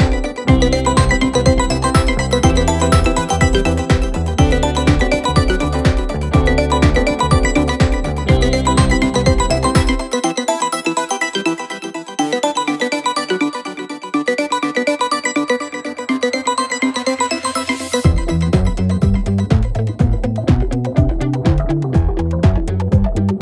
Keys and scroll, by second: 1.6 shift+f, 2.9 ctrl+d, 3.0 Escape, 4.6 ], 7.1 ], 10.0 4, 20.8 2, 21.5 ].